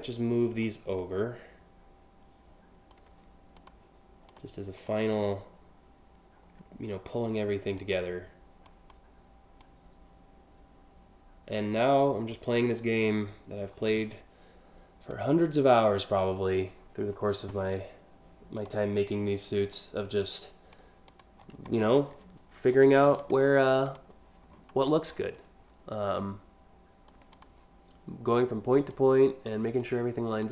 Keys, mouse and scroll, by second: 0.2-2.5 drag, 3.2 click, 4.0 click, 4.5 click, 4.7 click, 6.0 scroll down 1, 6.2 scroll up 1, 6.5 scroll down 1, 7.4 click, 8.3 drag, 9.2-12.0 drag, 14.7-16.0 drag, 16.4 scroll up 1, 18.2 click, 19.4-20.4 drag, 20.7 click, 21.4 scroll down 3, 22.4 click, 22.8 click, 23.5 click, 24.1 scroll down 2, 24.5-24.8 scroll up 2, 25.8 click, 27.0 click, 28.0 click, 28.5 click, 30.0 click.